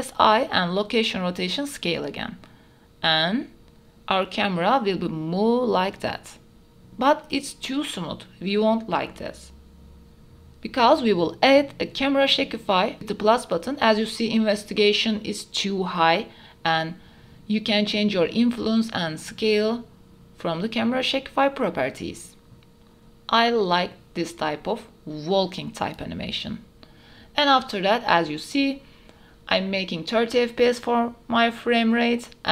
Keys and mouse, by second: 2.3 i, 4.3 click, 5.2 space, 7.6 space, 8.5 click, 10.6 space, 11.4 space, 11.8 click, 12.9 ctrl+s, 13.5 click, 17.1 space, 18.6-20.2 drag, 20.9 click, 21.8 space, 28.6 ctrl+s.